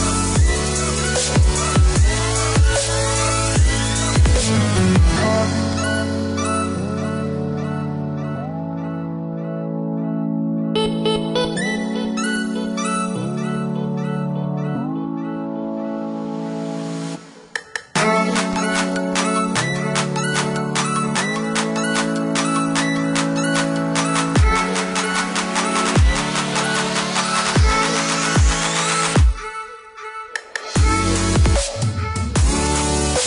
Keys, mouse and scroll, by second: 0.8 click, 2.9 click, 7.8 click, 9.0 click, 9.8 middle click, 11.7 click, 14.4 middle click, 16.1 click, 16.8 click, 17.0 middle click, 18.8 click, 20.0 click, 20.8 middle click, 22.8 click, 23.8 middle click, 26.3 click, 29.6 space, 30.8 click.